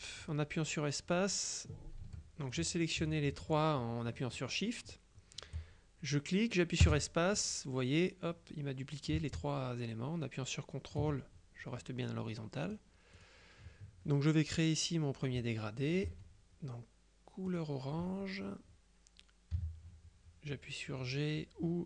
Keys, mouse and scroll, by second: 2.1 Delete, 2.6-4.1 drag, 6.2-11.5 drag, 6.9 space, 12.8 click, 16.2 F7, 17.6 click, 19.6 g.